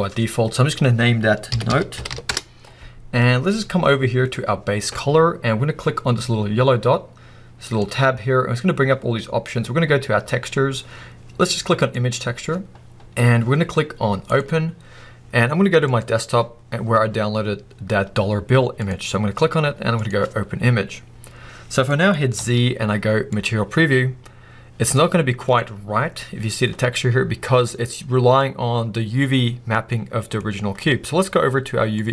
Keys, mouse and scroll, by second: 2.3 Return, 7.7 click, 13.2-21.9 drag, 21.9-32.1 middle drag, 22.4 z, 24.9 scroll down 2.